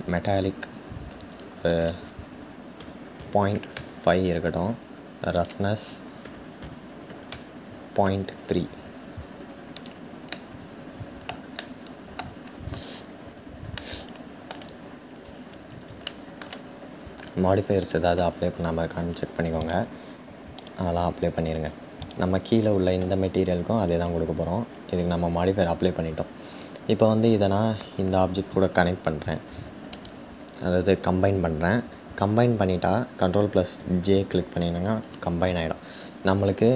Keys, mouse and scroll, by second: 8.3-9.4 scroll down 2, 9.9-12.0 middle drag, 12.0-13.4 scroll down 2, 13.4-13.8 scroll down 1, 13.8-14.8 shift+middle drag, 14.8-15.7 scroll up 3, 15.7-20.2 shift+middle drag, 20.2-21.7 drag, 29.6 shift+click.